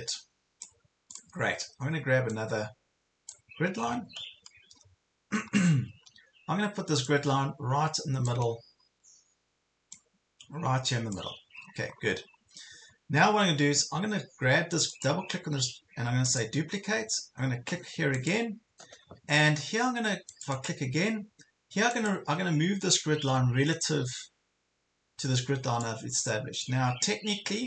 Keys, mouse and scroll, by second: 3.8 scroll up 1, 5.0 ctrl+scroll up 1, 6.0 ctrl+scroll down 1, 7.1-8.4 drag, 8.5 ctrl+scroll up 1, 10.0-11.2 drag, 11.6 ctrl+scroll down 1, 14.8-19.2 drag.